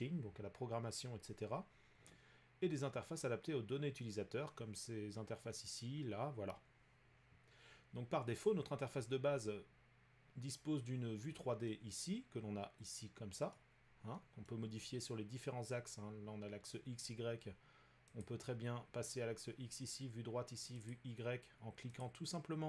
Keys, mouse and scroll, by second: 13.5 middle click, 14.5 middle click, 18.2 click, 20.9 click, 22.0 click.